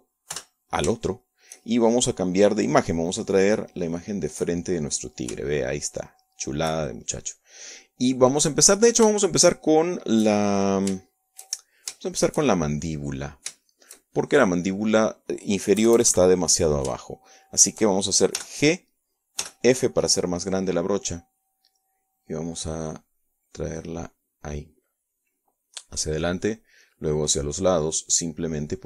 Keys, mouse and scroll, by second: 0.2 KP_Add, 2.0 3, 2.7 shift+click, 3.2 shift+middle click, 4.1 click, 5.0 click, 6.0 middle click, 7.0-8.2 shift+middle drag, 10.9 shift+middle click, 12.0-13.6 shift+drag, 14.5-16.6 drag, 17.4 KP_Add, 18.8 shift+click, 20.0 g, 21.1 f, 21.8 click, 22.2 middle click, 23.6-27.2 drag, 27.6-28.7 drag.